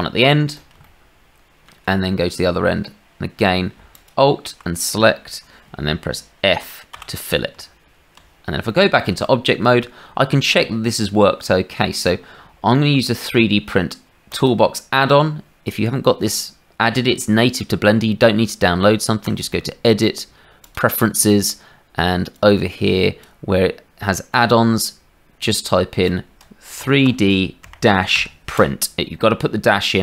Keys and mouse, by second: 0.8 shift+click, 3.9 alt+click, 6.9 f, 7.5 Tab, 8.6 click, 9.2 shift+click, 19.2-20.9 drag.